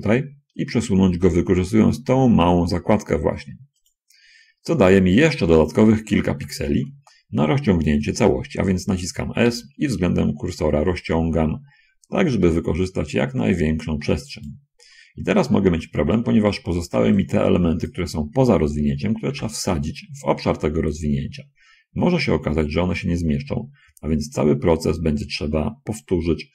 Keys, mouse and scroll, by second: 4.2 click, 4.6-4.9 scroll up 2, 4.9-5.5 scroll down 2, 6.6 a, 7.0 a, 9.8 s, 14.7 click, 16.4 a, 17.3 b, 17.5 click, 19.4 g.